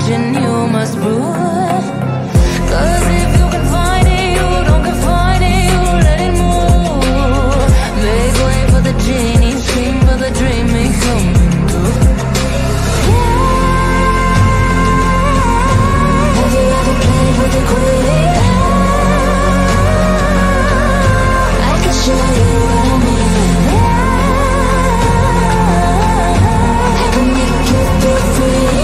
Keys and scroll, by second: 2.8 F3, 4.3 space, 16.5 F3, 17.0 shift+F2, 23.3 shift+F2.